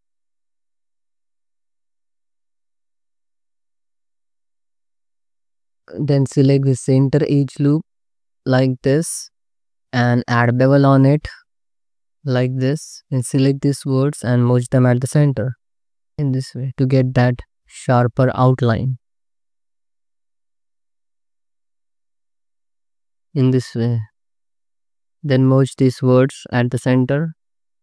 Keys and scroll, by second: 1.6 ctrl+z, 6.1 2, 11.2 ctrl+b, 12.1 4, 13.4 1, 15.1 m, 15.7 Tab, 16.2 2, 19.6 ctrl+b, 21.0 3, 21.4 alt+s, 23.0 Tab, 23.2 alt+shift+z, 24.2 alt+shift+z, 24.7 Tab, 24.9 ctrl+z, 27.3 m.